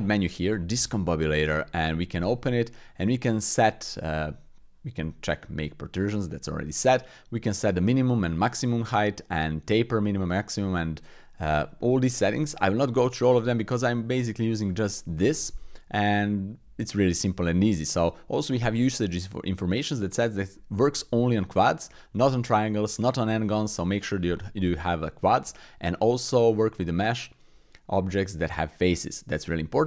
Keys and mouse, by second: 1.5 click, 18.1-29.8 drag.